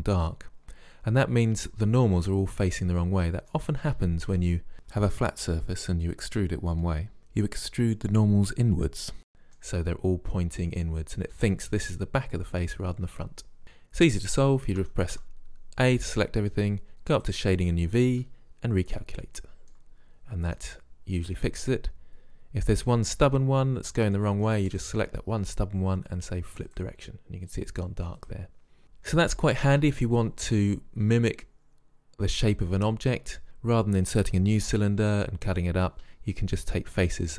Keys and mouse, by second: 1.8 middle click, 2.2 middle click, 2.8 middle click, 3.2 middle click, 3.4 middle click, 3.6-6.5 middle drag, 8.3 middle click, 9.2 middle click, 9.4 middle click, 9.5-11.6 drag, 14.8 a, 15.2 a, 19.8-20.8 middle drag, 24.8-26.6 right drag, 26.6 middle click, 26.8 click, 28.8-37.3 middle drag.